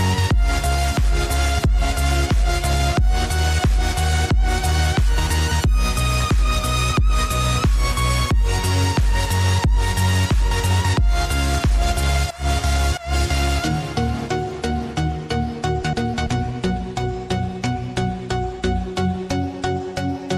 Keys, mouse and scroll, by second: 1.1 click, 2.2 shift+click, 3.2 shift+click, 3.9 shift+click, 6.1-9.0 drag, 10.2-13.2 shift+drag, 14.4 shift+click, 15.5-17.3 drag, 17.6 ctrl+z, 18.5 click, 20.1 Tab.